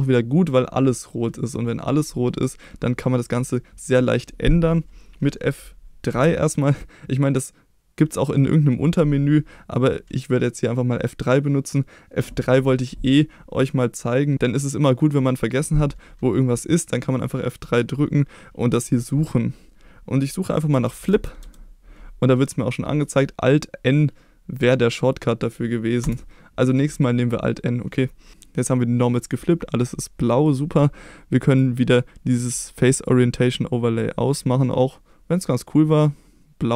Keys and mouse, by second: 1.0 middle click, 6.1 F3, 27.6 middle click, 31.5-33.3 drag, 35.4-36.7 drag.